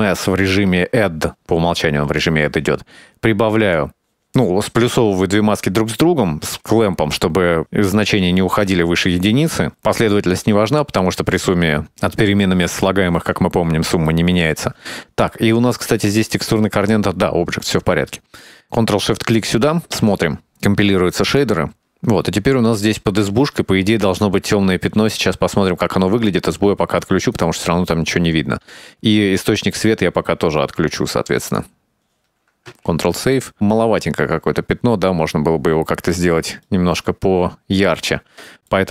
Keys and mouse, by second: 2.3-3.9 drag, 6.9 click, 9.4 middle click, 15.6-19.1 middle drag, 19.5 ctrl+shift+click, 24.0-25.6 shift+middle drag, 28.3 click, 31.7 click, 32.8 ctrl+s, 33.5-34.2 middle drag, 35.1-35.6 shift+middle drag, 37.3 middle click, 38.6 middle click.